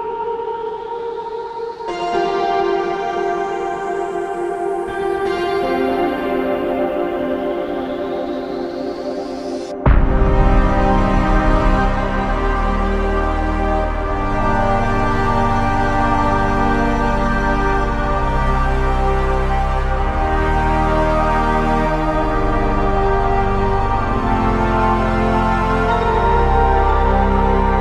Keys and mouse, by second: 4.3 typing, 13.7 g, 24.6 double click.